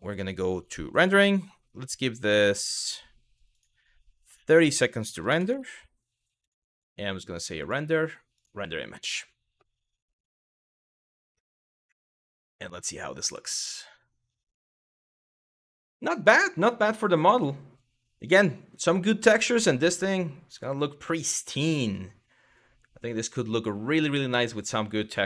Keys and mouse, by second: 0.2 click, 3.1 click, 4.1-5.2 drag, 6.1 click, 7.2-8.1 drag.